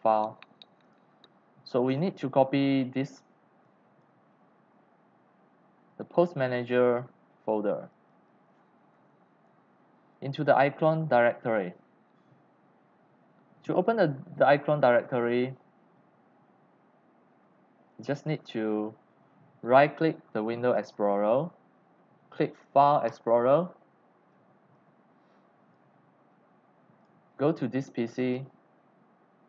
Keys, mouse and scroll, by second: 0.1 click, 0.8 click, 1.8 click, 2.1 click, 2.4 click, 3.6 click, 6.6 click, 7.1 click, 8.0-9.7 typing, 13.2 click, 20.7 right click, 23.0 click, 24.7 click, 27.0 click, 28.2 click.